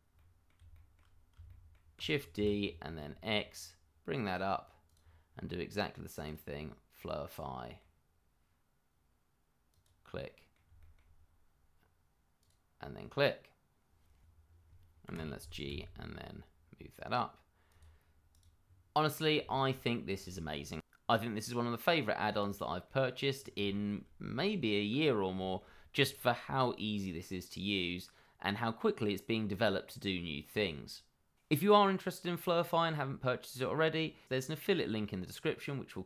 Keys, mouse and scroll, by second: 0.1 middle click, 0.8 shift+middle click, 1.5 middle click, 1.6 shift+middle click, 1.9 shift+d, 2.3 y, 2.8 x, 4.8 click, 7.3 middle click, 9.7 click, 10.2 middle click, 12.4 click, 15.0 g, 15.6 x, 17.6 click, 18.6 scroll down 1, 18.9 middle click, 19.4 shift+middle click, 19.5 middle click, 19.6 shift+middle click, 20.3 middle click, 20.4 shift+middle click, 20.8 middle click, 21.7 shift+middle click, 22.0-22.5 scroll up 1, 22.6 shift+middle click, 23.3-25.3 scroll up 1, 26.0 scroll down 1, 26.3 click, 26.7 middle click, 27.2-27.5 scroll down 1, 27.5 shift+middle click, 28.3-28.9 scroll up 1, 28.9-29.2 scroll down 1, 29.3 shift+middle click, 29.4 middle click.